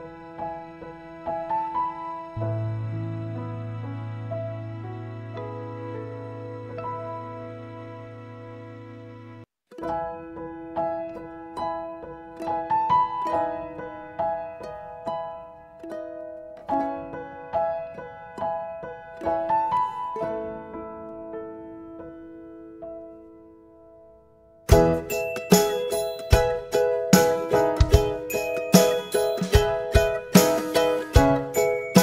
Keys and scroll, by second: 0.5 typing, 2.2-7.2 typing, 24.1-25.3 typing, 25.8 Return, 29.1-29.8 typing.